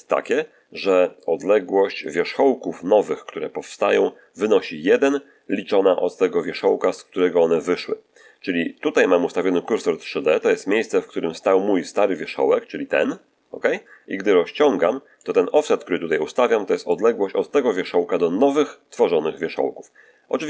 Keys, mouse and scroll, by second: 11.8-15.3 drag, 16.8-20.4 drag.